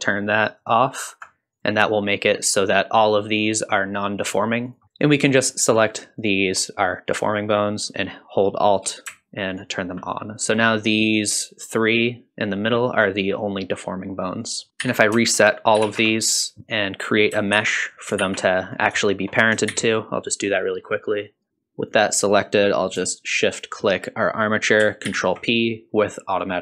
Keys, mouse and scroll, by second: 0.5 alt+click, 1.5 click, 2.4 click, 3.3 click, 4.2 click, 4.6 click, 4.8 click, 5.4 shift+click, 6.2 shift+click, 9.5 alt+click, 14.3 click, 14.8 a, 15.8 alt+g, 15.8 alt+r, 16.3 click, 16.6 ctrl+Tab, 16.8 alt+z, 16.9 click, 17.0 shift+middle click, 17.1-19.2 typing, 19.9 ctrl+r, 20.1 Tab, 20.5 alt+z, 21.8 drag, 23.3 shift+click, 25.1 ctrl+p.